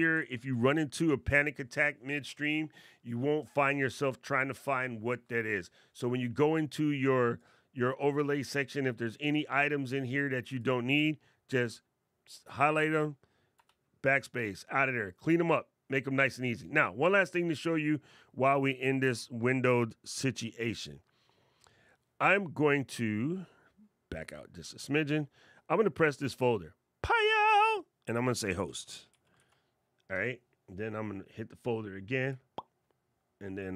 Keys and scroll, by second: 0.5 alt+super+8.